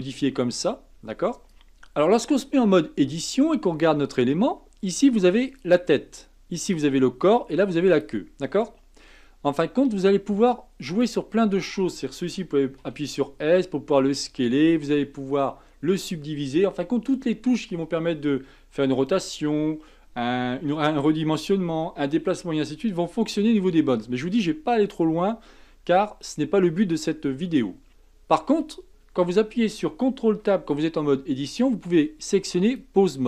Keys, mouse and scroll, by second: 1.5 Tab, 3.0 Tab, 5.5 click, 6.7 click, 7.9 click, 10.9 click, 12.8 s, 27.9 ctrl+Tab, 30.4 ctrl+Tab.